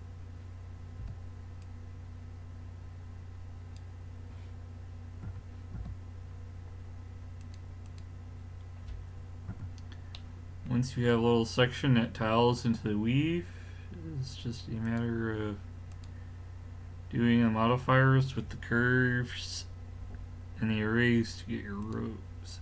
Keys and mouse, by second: 1.1 b, 5.3 x, 7.4-9.1 drag, 9.1-10.2 middle drag, 9.5 z, 12.5 middle drag, 13.0 middle click, 14.9-17.7 drag.